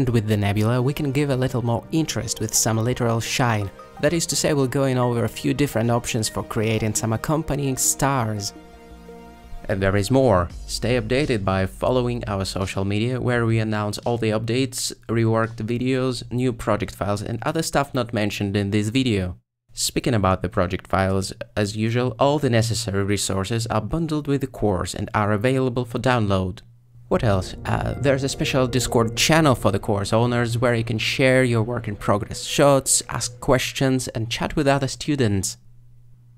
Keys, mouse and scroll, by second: 0.3 z, 2.8-4.0 middle drag, 4.6-6.5 ctrl+middle drag, 6.9 alt+shift+z, 7.5-9.5 shift+middle drag.